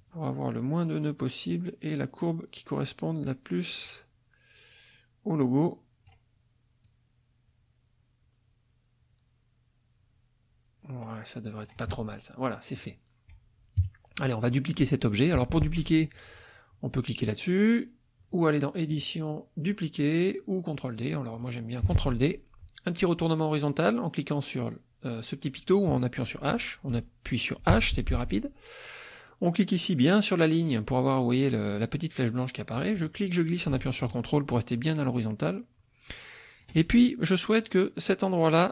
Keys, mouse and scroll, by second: 0.0-6.2 drag, 6.9-11.0 drag, 11.0-11.8 scroll down 1, 12.7 click, 13.8 -, 13.9-15.0 middle drag, 18.9 click, 21.3 click, 21.9 ctrl+d, 27.7 h, 33.0-36.8 drag, 37.3 click.